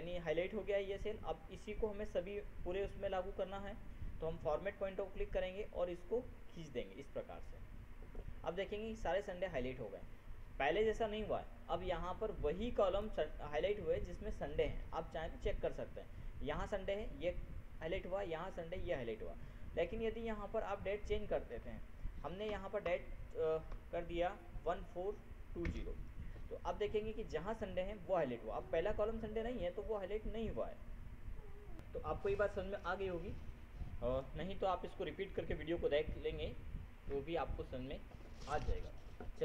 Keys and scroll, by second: 22.9 ctrl+Left, 23.2 ctrl+BackSpace, 24.1 ctrl+4, 26.0 ctrl+Return, 32.3 ctrl+F7.